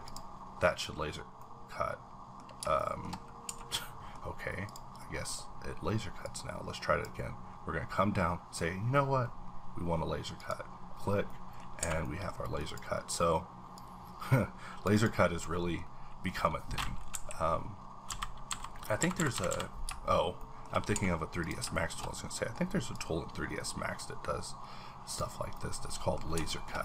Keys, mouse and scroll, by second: 0.8-1.4 scroll down 3, 1.4-2.8 middle drag, 2.8 shift+middle click, 3.2 scroll up 1, 3.5 a, 3.8 middle click, 4.7 click, 5.0 click, 5.5-6.2 scroll up 2, 6.5-9.1 drag, 10.4 click, 10.9-11.3 scroll down 3, 11.3 middle click, 11.7 scroll down 1, 11.8 a, 12.0 middle click, 12.3 scroll up 1, 12.6 click, 13.8-15.3 drag, 15.7-16.1 middle drag, 15.8 scroll up 1, 20.4 shift+middle click, 20.6-21.4 shift+scroll up 3, 20.9 a, 21.4 click, 21.7 shift+middle click, 21.9-22.9 shift+scroll up 2, 22.9-26.2 drag, 25.5 middle click, 26.2 scroll down 2, 26.5 shift+middle click.